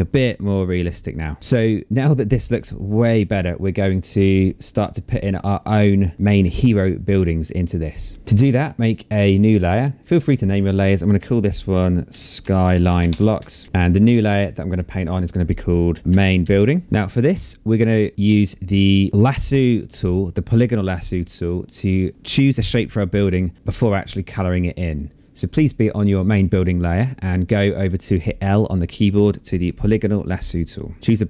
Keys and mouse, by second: 8.8 click, 11.4-13.0 typing, 13.6 Return, 14.4 click, 15.5-17.0 typing, 19.1 click, 20.8 click, 25.5 click, 27.5 click.